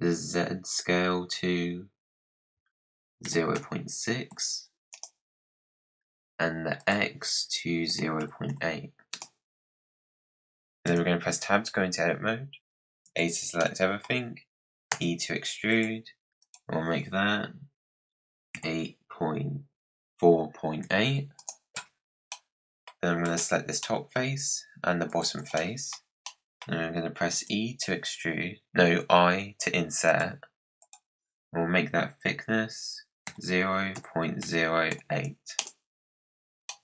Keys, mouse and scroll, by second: 6.7-9.6 drag, 10.7 Tab, 11.5-13.0 scroll down 4, 13.0 a, 13.5-14.8 middle drag, 14.8 e, 16.3-18.2 drag, 22.2 middle click, 23.1 click, 23.7-25.0 middle drag, 25.0 shift+click, 25.5-27.2 middle drag, 30.7-33.8 drag, 35.9 scroll up 1, 36.0 middle click, 36.2 click, 36.6-36.8 middle drag.